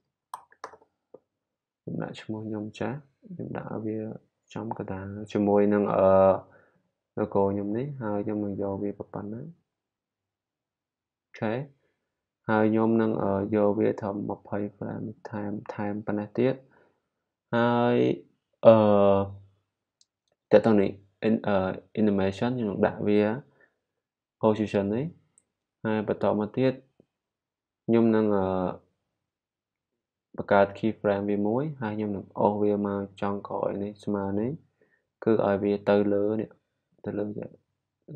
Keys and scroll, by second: 0.0-1.1 typing, 23.8 p.